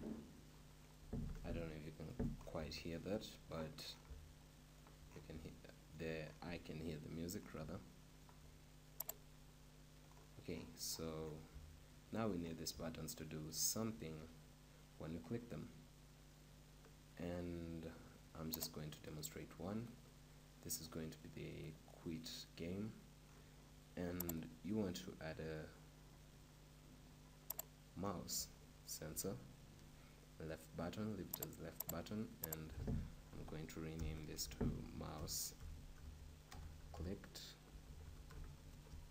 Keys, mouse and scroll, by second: 0.8 middle click, 1.8-7.9 middle drag, 8.4 middle click, 9.8 middle click, 9.8-12.0 drag, 12.0-14.9 middle drag, 18.6-20.5 drag, 19.2-39.1 right drag.